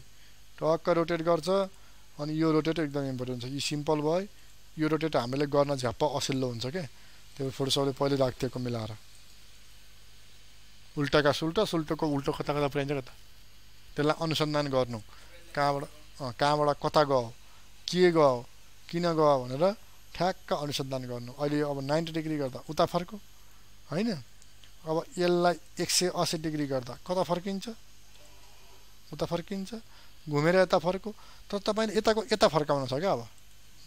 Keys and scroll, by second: 24.1 ctrl+z, 30.5 ctrl+alt+z.